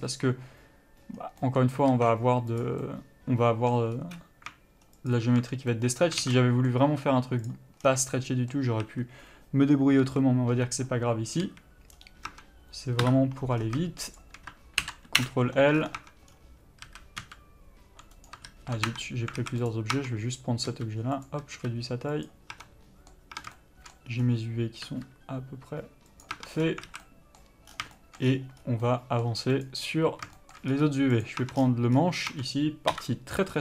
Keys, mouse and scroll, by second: 1.3 scroll down 1, 1.6 middle click, 2.1 alt+a, 2.7 click, 3.0 middle click, 4.1-5.3 scroll up 1, 5.3 alt+shift+click, 5.9 middle click, 6.4 alt+a, 6.5 middle click, 7.6 click, 8.0 scroll down 1, 8.3 middle click, 9.0 a, 12.5 Tab, 13.3 KP_Divide, 13.8 scroll down 1, 14.4 shift+click, 15.5 Return, 16.0 scroll up 1, 16.2 Tab, 16.5-17.1 scroll down 1, 17.1 a, 17.4 s, 18.5 right click, 18.7 ctrl+z, 19.1 Tab, 19.6 alt+a, 19.9 click, 20.1 Tab, 20.9 s, 21.5 click, 21.7 s, 22.7 Tab, 22.8 middle click, 23.5 Tab, 23.8 shift+middle click, 24.3 scroll up 1, 25.1 r, 26.6 Tab, 26.7 scroll down 1, 27.1 alt+a, 27.3 middle click, 27.9 scroll down 1, 28.1 shift+middle click, 28.5 scroll up 1, 29.0 middle click, 29.8 click, 30.6 shift+middle click, 30.9 scroll up 1, 31.4 click, 31.6 Tab, 31.8-32.1 scroll down 1, 32.1 scroll up 1, 32.5 Tab, 33.1 KP_Divide.